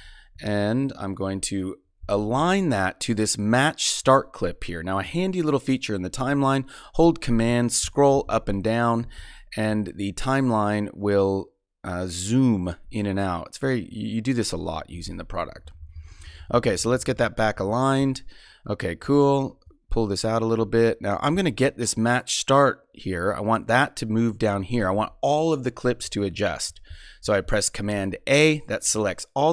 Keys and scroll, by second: 15.5 Right, 27.2 super+a.